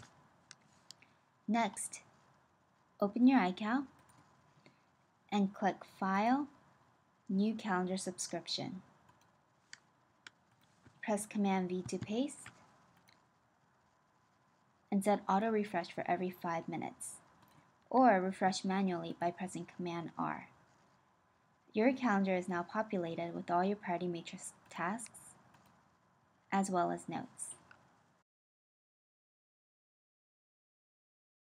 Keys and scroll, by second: 11.4 super+v, 19.8 super+r.